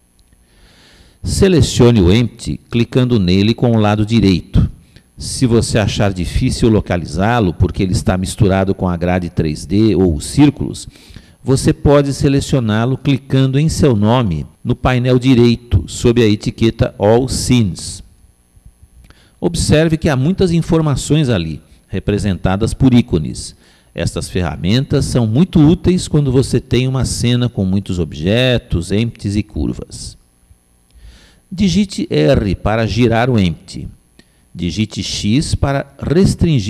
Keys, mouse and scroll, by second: 2.2 click, 14.0 click, 35.4 r.